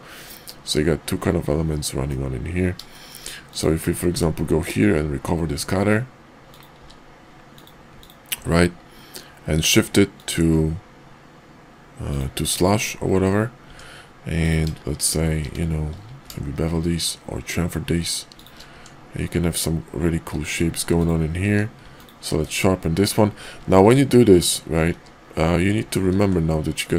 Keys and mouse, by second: 2.9 shift+middle drag, 3.4 click, 4.1 q, 6.3 click, 6.8 q, 8.3 q, 13.7 Tab, 16.0 ctrl+b, 18.7 Tab, 20.3 shift+2, 20.9 click, 21.4 q, 23.7 ctrl+z, 24.9 q, 26.0 ctrl+`.